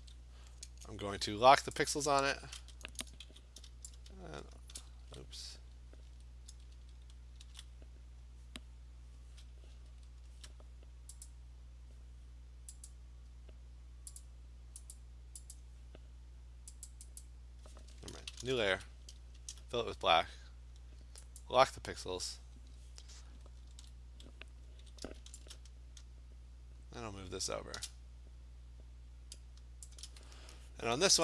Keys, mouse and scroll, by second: 0.0 ctrl+d, 1.8 click, 3.2 v, 4.8 click, 5.0 ctrl+z, 6.1 ctrl+alt+z, 6.5 ctrl+alt+z, 6.8 ctrl+alt+z, 7.5 ctrl+alt+z, 9.9 ctrl+alt+z, 11.3 click, 12.9 click, 14.2 click, 15.0 click, 15.5 click, 16.9 click, 17.2 click, 18.3 ctrl+shift+n, 18.7 Return, 19.4 alt+BackSpace, 21.4 click, 23.7 ctrl+d, 24.8 v, 29.9 shift+click.